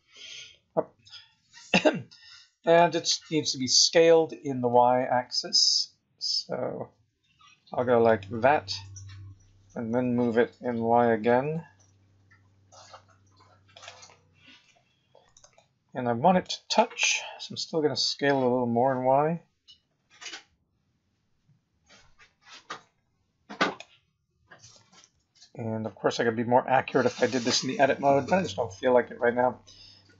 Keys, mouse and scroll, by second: 4.2 s, 10.0 g, 14.1-14.6 scroll up 6, 15.5 shift+middle click, 18.1 s, 24.7 g.